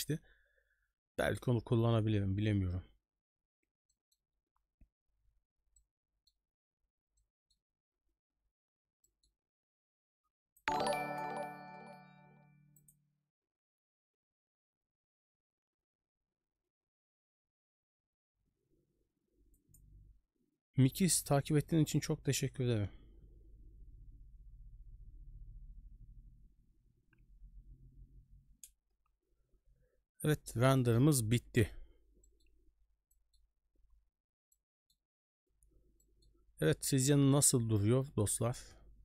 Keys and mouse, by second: 3.9 middle drag, 5.7-6.2 middle drag, 7.2 middle click, 9.0 middle click, 10.6 click, 30.8 middle click, 31.5 ctrl+space, 32.3 middle click, 33.1 middle click, 34.5 middle click, 36.0 middle click.